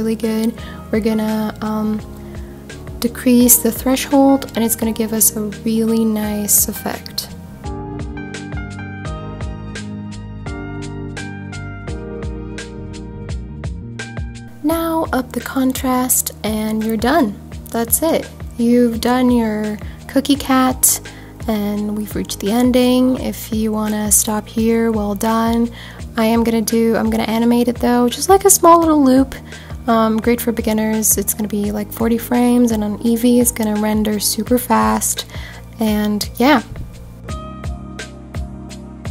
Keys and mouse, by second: 18.0 click, 19.3-20.3 drag, 24.7-25.3 drag, 28.9-31.6 drag, 34.3 click.